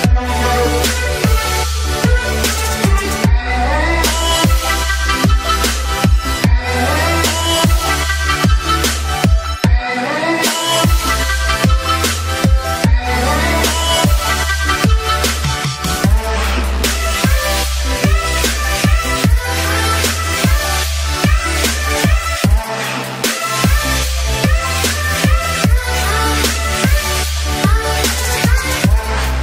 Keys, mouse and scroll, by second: 5.7-7.7 typing, 7.6 click, 9.1-10.1 drag, 12.1-13.9 drag, 15.3 ctrl+Return, 15.7 ctrl+j, 15.8 click, 15.9-17.3 typing, 16.6 click, 17.1 Return, 19.0 space, 19.0 click, 19.1 space, 19.4-21.1 drag, 21.1 alt+click, 22.2 alt+click, 22.3 space, 22.5 click, 23.2 click, 24.4 space, 24.6 alt+click, 24.9 space, 25.1 click, 26.3 ctrl+j, 26.5 click, 26.6-28.0 typing, 27.8 click, 27.9 right click, 28.0 click.